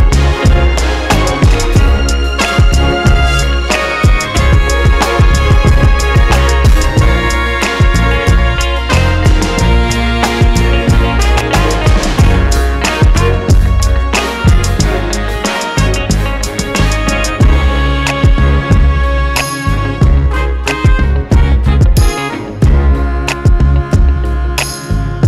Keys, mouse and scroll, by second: 3.9 click, 8.1 drag, 8.5-9.7 drag, 10.3 Tab, 10.7 scroll down 1, 11.1 click, 11.5 KP_Decimal, 11.9 `, 12.1 scroll up 1, 12.3 scroll down 1, 12.5 `, 13.1 click, 13.8 click, 14.3-15.9 drag, 14.9 ctrl+t, 15.9 click, 18.0 click, 20.7 Tab, 22.4 Tab, 22.5 s, 22.9 right click.